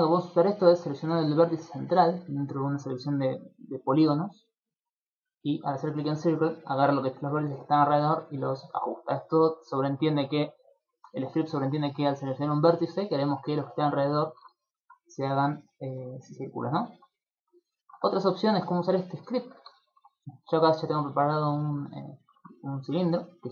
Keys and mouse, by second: 0.7 right click, 5.1 click, 15.5 shift+middle click, 16.3 middle click, 16.8 shift+middle click, 17.3 ctrl+middle click, 17.7 shift+middle click, 18.3 right click, 18.9 Tab, 19.1 right click, 19.3 Tab, 19.9 shift+middle click, 20.1 middle click, 21.1 shift+middle click, 21.5 middle click, 21.9 middle click, 22.2 shift+middle click.